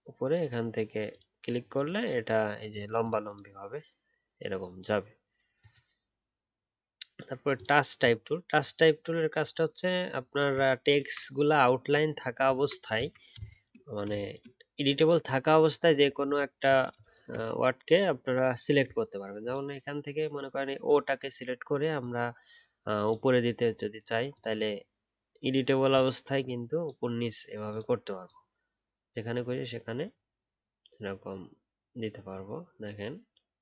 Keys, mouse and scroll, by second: 9.5 alt+scroll up 3, 10.2-10.7 alt+scroll down 1, 12.5 alt+scroll down 1, 16.2 alt+scroll up 1.